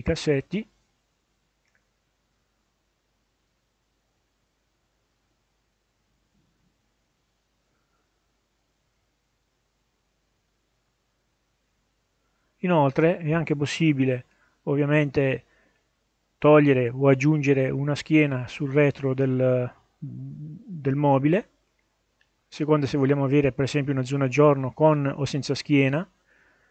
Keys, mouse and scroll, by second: 0.6-7.1 drag, 8.7-11.2 drag, 11.8 scroll down 1, 12.4 middle click, 12.8-14.1 scroll up 2, 14.1-14.8 scroll down 2, 15.1 scroll up 1, 16.0 middle click, 20.5 click, 22.1 click, 23.8-24.4 scroll down 1, 24.4 middle click, 25.4 middle click.